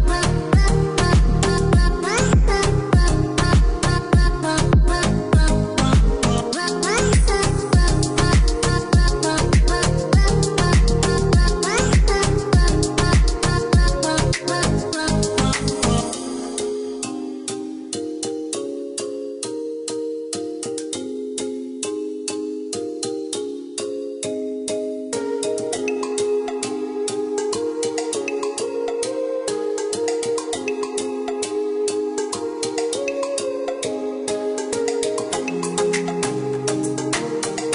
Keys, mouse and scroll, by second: 0.1 click, 3.3 click, 4.2 click, 4.9 KP_0, 5.1 KP_Decimal, 5.5 KP_7, 6.4 Return, 7.1 Escape, 8.9 click, 13.7 click, 14.9 click, 16.4 click, 17.3 KP_1, 17.7 Return, 18.4 Escape, 20.2-20.8 scroll down 1, 22.3-23.0 scroll up 1, 23.0-23.5 scroll down 1, 23.9 click, 25.4 click, 26.1-28.3 scroll up 1, 30.3 click, 32.3 click, 32.9 click, 35.6 click.